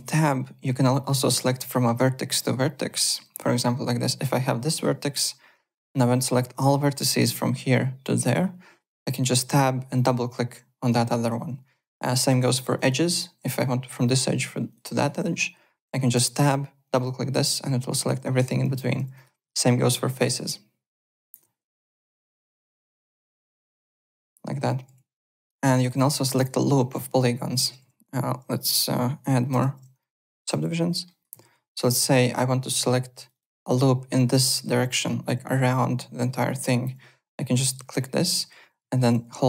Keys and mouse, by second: 0.9 click, 1.5 alt+Tab, 3.0 click, 3.6 1, 4.1 click, 9.8 shift+click, 11.8 alt+click, 11.9-12.8 typing, 12.7 click, 13.0 alt+click, 14.7 alt+click, 14.8 alt+right click, 16.8 shift+click, 18.5-19.4 typing, 19.1 click, 20.1 shift+click, 21.1 alt+right click, 21.8 click, 23.3 shift+click, 24.9 alt+Tab, 25.3 click, 26.3 click, 27.0 alt+click, 27.4-31.9 typing, 28.5 click, 29.9 middle click, 30.9 alt+middle click, 31.1 alt+right click, 31.8 click, 33.2 shift+click, 34.6 alt+click, 35.4 alt+click, 36.6 alt+click, 37.6 click, 37.9 click, 39.2 Tab.